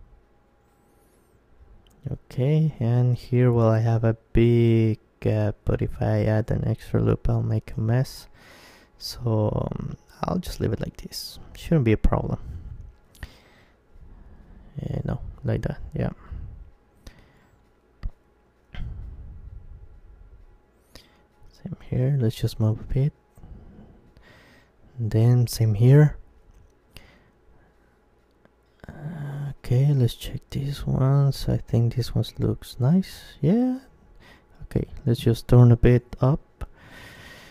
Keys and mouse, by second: 0.2 g, 0.4 middle click, 0.5-2.2 drag, 1.3-5.1 middle drag, 3.3-5.9 right drag, 5.1 g, 7.1-9.9 drag, 8.2-10.8 right drag, 9.9 g, 12.7-14.6 drag, 13.8 ctrl+z, 14.6-16.1 middle drag, 15.3 Tab, 16.8-17.8 middle drag, 17.8 Tab, 18.8-20.3 middle drag, 19.8-21.4 right drag, 20.3 g, 22.5-25.5 drag, 23.4-26.0 right drag, 25.5 g, 26.8 click, 27.5-31.1 middle drag, 31.1 z, 31.7 z, 31.9 Tab, 33.5 Tab, 35.2 g.